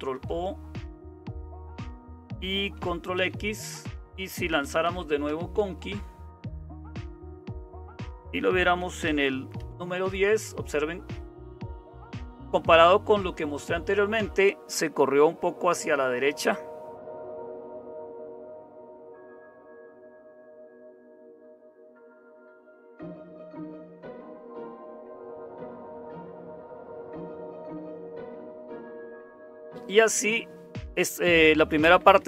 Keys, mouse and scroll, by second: 0.0-32.2 typing, 1.3 Return, 6.8 Tab, 9.5 Return, 18.2 super+1, 23.4 ctrl+c, 24.5 Up, 24.9 Up, 26.5 Return, 27.7 Down, 28.4 Down, 28.5 Down, 28.7 Down.